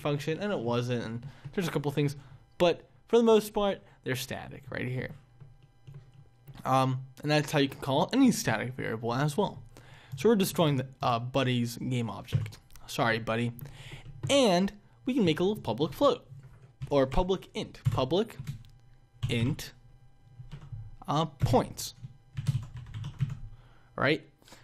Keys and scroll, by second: 17.8 Return.